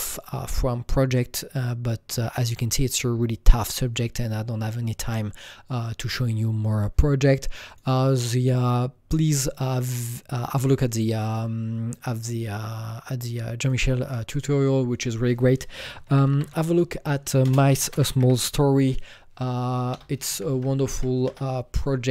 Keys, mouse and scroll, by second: 7.7 click, 10.0 click, 13.6 click, 14.3 click, 16.1 typing, 17.4-18.5 typing, 19.8-21.3 typing, 20.9 Down, 21.3 Return.